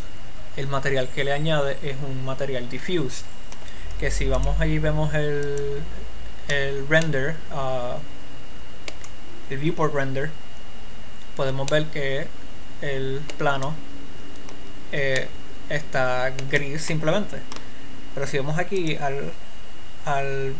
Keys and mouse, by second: 4.8 click, 5.0 click, 5.6 click, 7.7-9.5 middle drag, 20.0-20.5 drag.